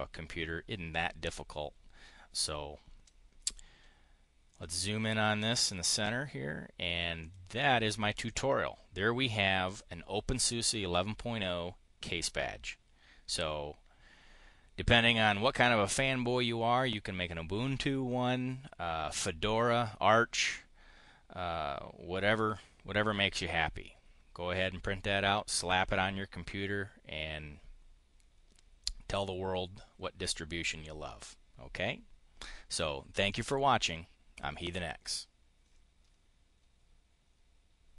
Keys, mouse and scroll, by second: 3.3 click, 4.4 click, 5.4 click, 7.0 click, 7.4 click, 8.1 click.